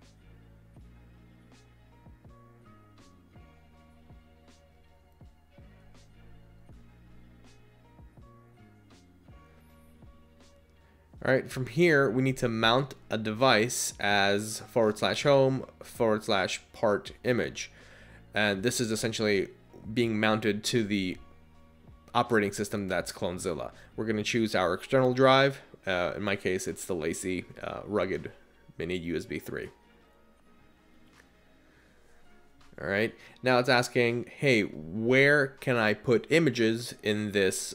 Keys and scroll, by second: 23.3 Down, 23.7 Down, 31.8 Return.